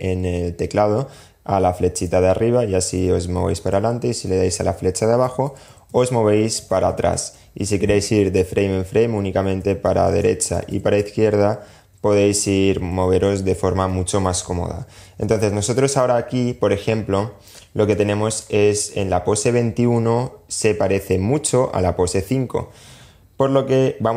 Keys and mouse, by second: 1.2 Up, 2.1 Up, 2.9 Up, 4.4 Down, 4.7 Down, 5.0 Down, 5.1 Down, 5.8 Down, 8.8 Right, 9.1 Right, 9.2 Right, 9.4 Right, 9.7 Left, 9.9 Left, 10.1 Left, 10.2 Left, 11.0 Up, 11.4 Up, 11.6 Up, 12.1 Up, 14.1 Up, 14.5 Up, 16.6 click.